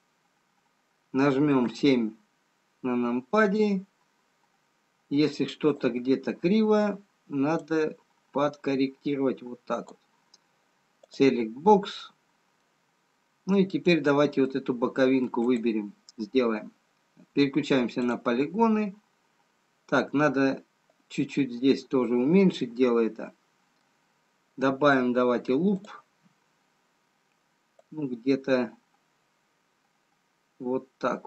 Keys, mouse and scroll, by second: 0.2-1.3 scroll up 1, 1.3-2.7 scroll up 2, 2.7 KP_7, 4.1-4.8 scroll up 2, 5.6-7.4 scroll up 1, 9.1 click, 11.4 click, 11.9-13.3 scroll up 2, 13.3 middle click, 13.3-13.6 scroll down 2, 14.7 middle click, 14.7-15.9 scroll down 1, 15.9 click, 18.3 click, 23.9 middle click, 23.9-24.3 scroll up 3, 25.6 scroll down 2, 27.3 click, 28.7 click.